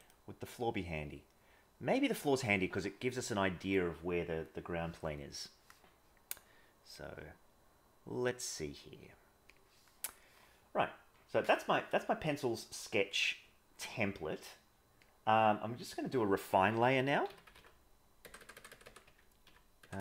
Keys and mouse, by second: 16.0-20.0 drag, 18.3 BackSpace.